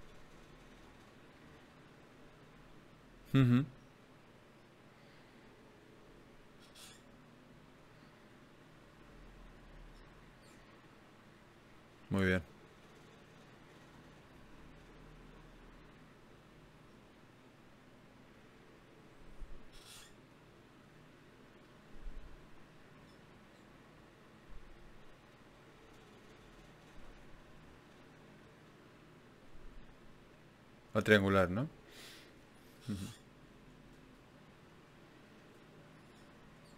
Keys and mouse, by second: 2.1 ctrl+z, 3.5 ctrl+z, 5.9 ctrl+Tab, 6.9-15.5 drag, 7.9 right click, 15.5 middle click, 16.3 KP_1, 27.4-29.6 drag, 29.6-31.4 right drag, 30.6 g, 33.2 g, 33.6 click, 35.2 right click, 35.8 right click.